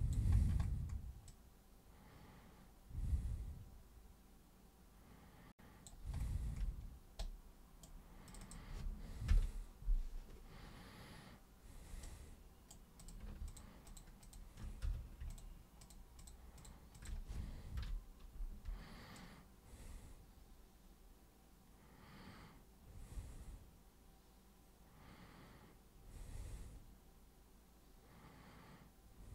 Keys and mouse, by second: 1.3-5.8 alt+super+drag, 7.2 super+right click, 8.3 super+click, 8.4 click, 12.0 right click, 13.0 click, 13.4 ctrl+shift+click, 13.8 ctrl+shift+click, 14.2 ctrl+shift+click, 14.8 z, 15.3 shift+click, 15.8 shift+click, 16.1 shift+click, 16.6 shift+click, 16.9 shift+click, 19.1-29.3 alt+super+drag.